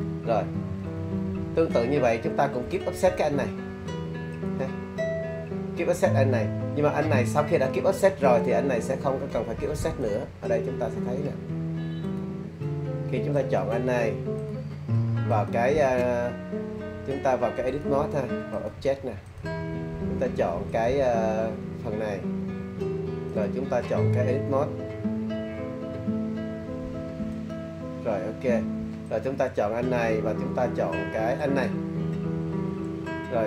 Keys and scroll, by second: 0.5 super+z.